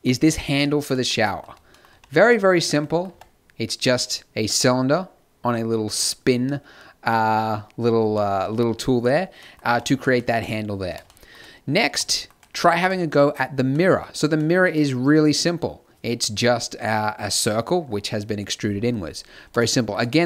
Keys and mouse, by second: 1.8 space, 3.6 t, 6.4 click, 8.1 e, 9.3 Tab, 9.3 ctrl+n, 12.5 right click, 12.8-14.2 middle drag, 14.7 s, 16.2 e, 16.5 s, 18.0 g, 19.1 middle click.